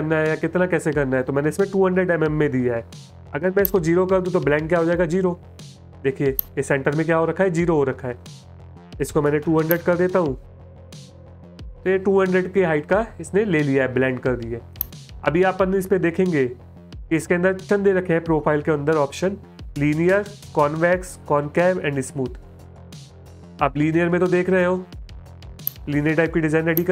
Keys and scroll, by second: 4.2 BackSpace, 4.4 BackSpace, 4.6 BackSpace, 5.7 space, 9.7 BackSpace, 12.7 space, 24.3 space, 25.0 space.